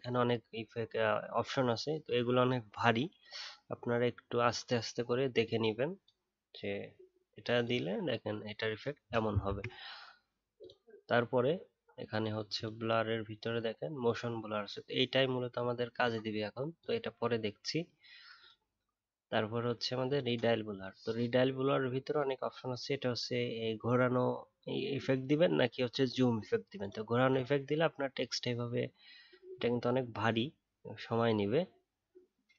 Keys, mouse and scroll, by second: 9.4 ctrl+z.